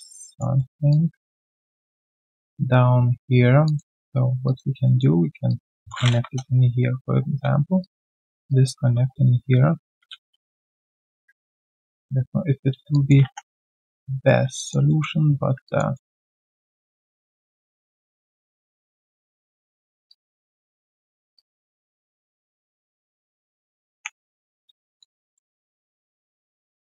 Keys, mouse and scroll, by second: 0.5 alt+middle click, 0.9 alt+click, 3.6 alt+click, 4.8 alt+middle click, 10.4 alt+click, 11.0 alt+right click, 12.9 alt+click, 13.9 right click, 14.3 q, 14.5 alt+click, 14.8 alt+middle click, 15.3 1, 15.6 alt+click, 15.9 alt+middle click, 17.0 right click, 18.2 shift+click, 18.7 shift+right click, 20.0 alt+click, 20.4 alt+middle click, 20.7 right click, 22.2 shift+click, 23.9 ctrl+Delete, 25.0 alt+click, 25.3 alt+middle click, 26.4 alt+middle click.